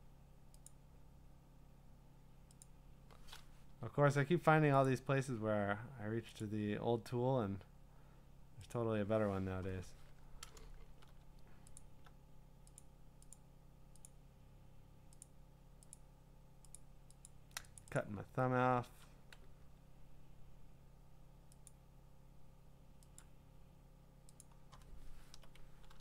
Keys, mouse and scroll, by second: 0.7 click, 2.6 click, 3.6 BackSpace, 4.9 click, 6.4 click, 8.7 click, 10.7 scroll, 11.8 alt+click, 12.8 click, 13.4 click, 13.5 alt+click, 14.1 click, 14.8 alt+click, 15.2 click, 16.1 click, 16.8 click, 17.3 click, 17.9 click, 18.0 click, 18.3-19.2 scroll, 21.7 click, 23.2 click, 24.4 click, 25.9 ctrl+i.